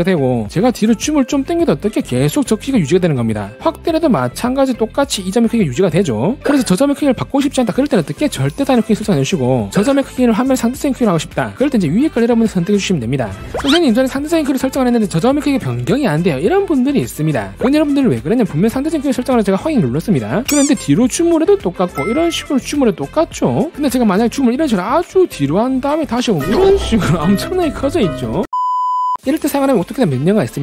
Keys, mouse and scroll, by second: 1.2-1.8 scroll up 4, 1.9 middle click, 2.0-3.0 typing, 2.7 click, 3.9-5.0 scroll up 5, 12.8 click, 20.0 click, 21.2 scroll up 2, 22.5-23.2 scroll up 3, 25.1 scroll up 1, 25.4-27.0 scroll, 27.3 middle click.